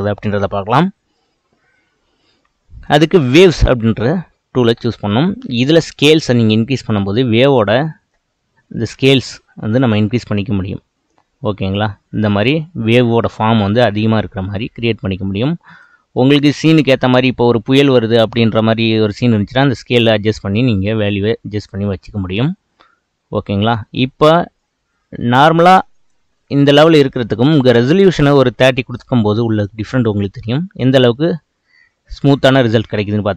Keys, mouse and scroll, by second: 3.5-4.6 drag, 4.6-6.1 middle drag, 6.1-8.4 drag, 8.4-9.9 middle drag, 9.9 space, 15.5 space, 16.3-18.5 drag, 18.5-20.0 middle drag, 20.0-23.1 drag, 24.0-25.3 middle drag, 25.3-26.3 drag, 26.3-27.8 middle drag, 27.8-30.8 drag, 30.8-31.4 middle drag, 31.4-33.0 scroll up 1.